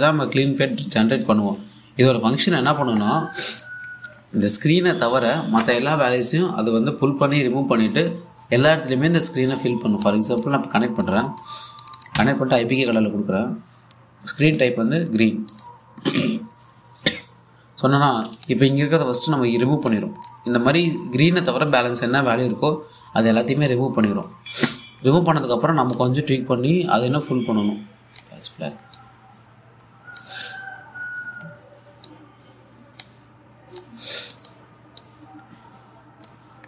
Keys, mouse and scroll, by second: 3.7-4.0 scroll down 1, 4.0 alt+click, 10.7-12.4 drag, 12.8 1, 15.2 click, 19.1 click, 19.3 1, 19.8 click, 20.0 2, 20.5-22.0 drag, 26.6-31.7 drag, 32.7-36.6 drag.